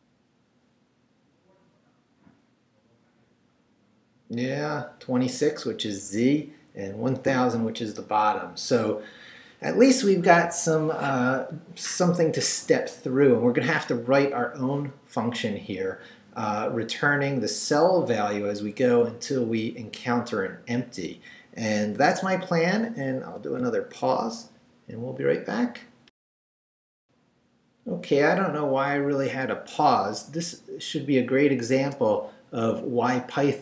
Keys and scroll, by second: 26.1 alt+shift+super+z, 31.8 Return.